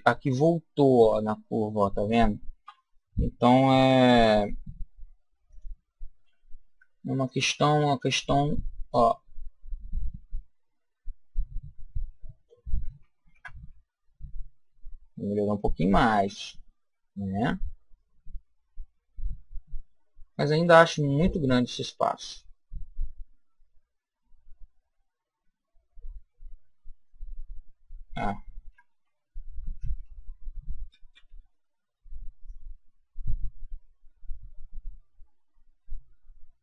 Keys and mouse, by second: 2.6 a, 5.5 click, 6.6 b, 8.9 click, 13.3 Tab, 13.7 Tab, 14.2 Tab, 15.9-19.9 middle drag, 21.8-27.0 middle drag, 25.9 Tab, 30.9 a, 31.1 a, 32.5 click.